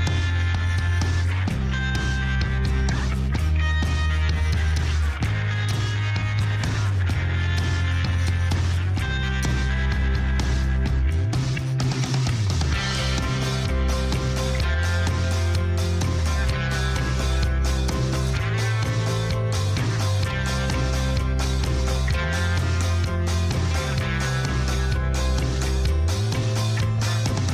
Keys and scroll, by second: 6.2 Tab, 8.7 Tab, 15.2 7, 15.5 shift+z, 21.1 shift+z, 23.5 e.